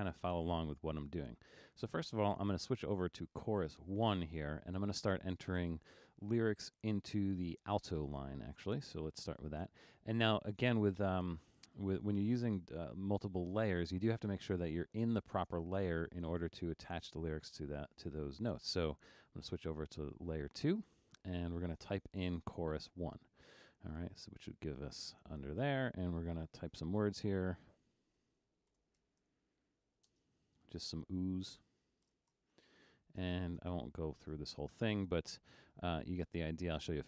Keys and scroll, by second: 19.4 alt+super+2, 28.5-30.2 typing, 32.2 shift+o, 32.6 h, 33.3 space.